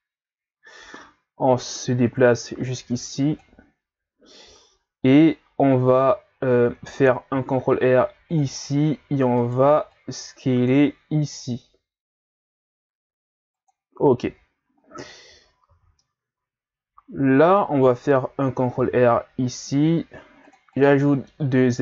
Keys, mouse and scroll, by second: 6.1 ctrl+scroll down 4, 7.3 ctrl+r, 9.4 right click, 9.6 b, 11.2 s, 15.8 z, 16.0-18.8 middle drag, 18.8 ctrl+r, 21.0-21.8 middle drag.